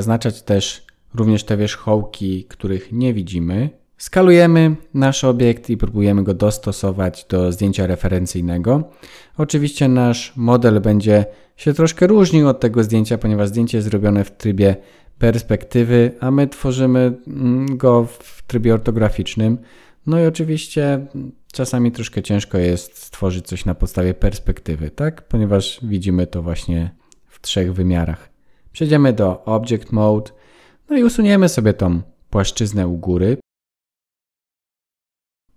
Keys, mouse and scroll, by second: 0.4 click, 1.1 click, 1.4 click, 3.2 s, 3.8 click, 3.9 s, 6.8 g, 10.4 s, 13.6 click, 14.9 s, 18.5 Tab, 21.8-23.3 scroll up 1, 23.5 middle click, 24.1-25.2 scroll down 11, 25.0 scroll up 4, 25.8 shift+middle click, 27.4 click, 28.0 middle click, 30.8 Tab, 33.3 Delete, 35.1 shift+middle click, 35.3 click.